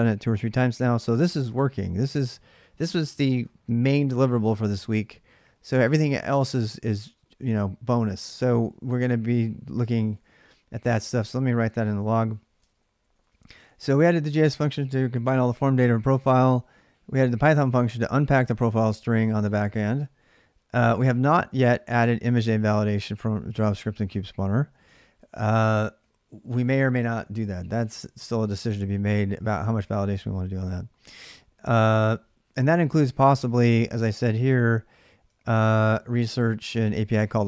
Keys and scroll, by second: 9.9 alt+Tab, 11.5 ctrl+a, 11.7-12.9 typing, 12.3 ctrl+[, 12.4 ctrl+j, 15.0 j, 16.2 j, 21.7 j, 22.4 j, 24.4-26.2 typing, 33.3 j, 33.5 j, 34.5-37.4 typing.